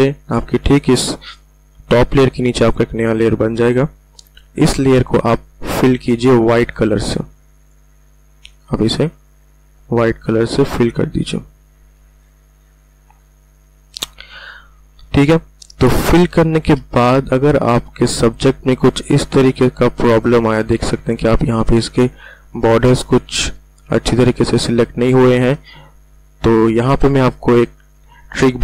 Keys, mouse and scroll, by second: 12.5 alt+BackSpace, 14.9 alt+scroll up 1, 16.1 space, 16.3 click, 16.6 space, 17.3 click, 17.7 space, 20.8 space, 21.1-22.8 ctrl+alt+scroll up 2, 22.8 space, 23.1 click, 23.3 space, 23.9 click, 24.3 space, 25.1 click, 25.5 space, 25.8 ctrl+alt+scroll down 1, 28.4 ctrl+alt+scroll down 1.